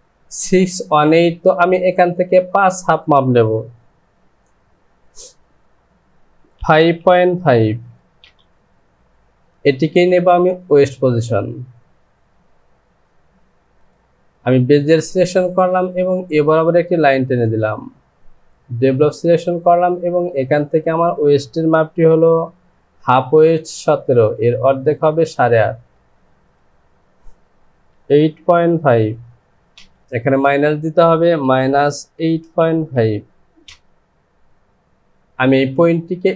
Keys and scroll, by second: 6.6 KP_5, 7.4 KP_Decimal, 27.9 KP_8, 28.9 KP_Decimal, 29.7 Return, 31.5 KP_Subtract, 32.2 KP_8, 33.6 KP_Decimal.